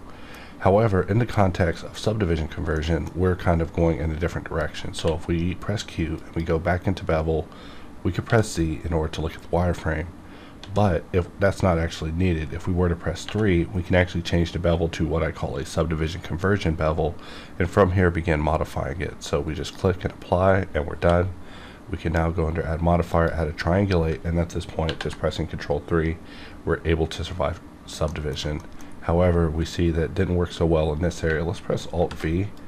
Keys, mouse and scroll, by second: 2.7 middle click, 3.4-4.9 scroll down 1, 4.9 q, 6.2 click, 8.2 z, 10.6 z, 13.2 3, 19.6 click, 20.9 q, 23.1 click, 24.8 ctrl+3, 28.3 middle click, 28.6 shift+middle click, 28.9-29.4 scroll up 1, 31.7 scroll up 1, 31.9 alt+v, 32.5 click.